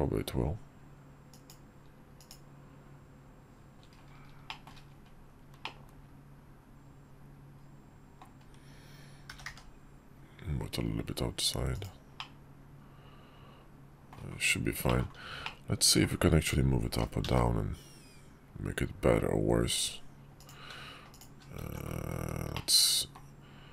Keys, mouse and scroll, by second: 4.2 shift+middle drag, 5.3-7.9 middle drag, 9.0 g, 11.9-13.9 middle drag, 14.7 middle click, 15.1-15.8 middle drag, 16.7 g, 20.8 shift+click, 21.3 alt+x, 22.3-22.9 drag.